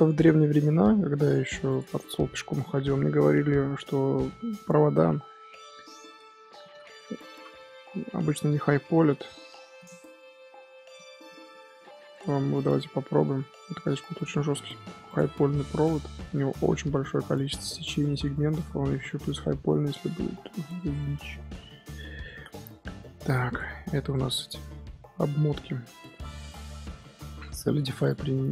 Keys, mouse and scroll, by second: 1.6 click, 2.5-5.6 drag, 10.9-13.0 middle drag, 13.0 ctrl+2, 14.1 click, 14.5-15.0 middle drag, 15.0 click, 16.0-18.2 middle drag, 18.2 Tab, 18.5 click, 19.4 middle click, 19.7 z, 20.1 scroll down 3, 20.3 z, 20.6-21.0 middle drag, 21.0 scroll up 1, 21.3-22.0 middle drag, 22.0 z, 22.2-23.4 middle drag, 23.4 click, 24.1-26.4 middle drag, 26.4 click, 27.6-28.5 drag.